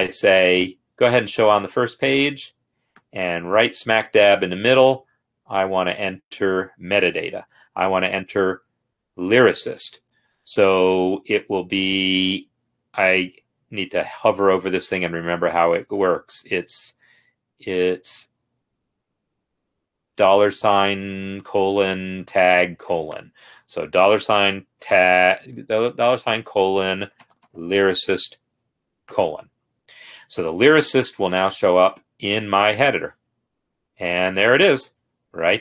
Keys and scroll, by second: 24.0 shift+4, 24.9 shift+;, 26.7-27.9 typing, 29.2 shift+;.